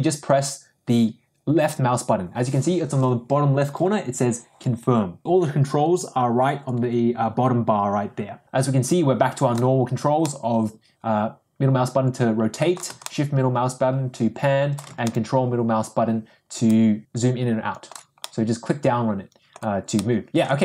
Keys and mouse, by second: 8.4-9.6 middle drag, 10.5-12.8 middle drag, 13.3-14.8 shift+middle drag, 15.3-17.8 ctrl+middle drag, 18.1-19.6 middle drag, 19.9-20.6 middle drag.